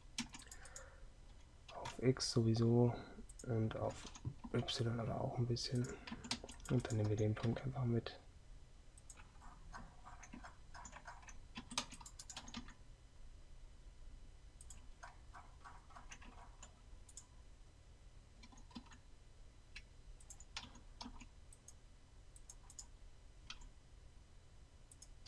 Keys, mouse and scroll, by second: 0.0 a, 0.3 c, 6.2 a, 7.4 g, 11.7 a, 11.9 c, 18.5 g, 20.7 a.